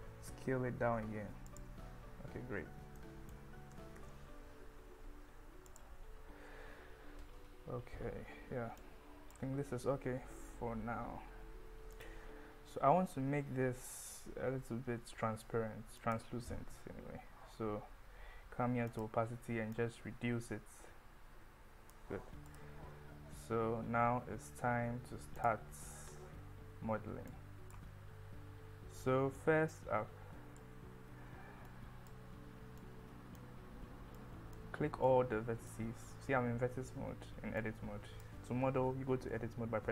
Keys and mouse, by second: 1.5 click, 3.8 g, 4.0 z, 5.7 click, 8.9 click, 11.9 click, 16.0 click, 18.9 click, 19.8-21.9 drag, 25.4 click, 26.5 Tab, 27.4 click, 29.9 click, 31.8 click, 32.9 click, 34.3 click, 35.1 click, 37.7 click, 38.8 Tab.